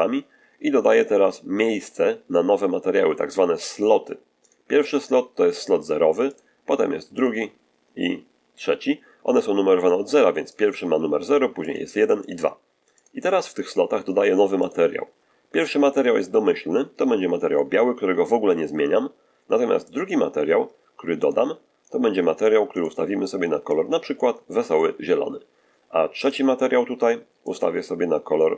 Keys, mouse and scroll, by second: 4.3 click, 6.2 click, 7.0 click, 10.4 click, 11.5 click, 12.1 click, 12.8 click, 14.5 click, 19.8 click, 21.1 click, 22.6 click, 23.6-24.2 drag, 26.1 click, 27.4 click.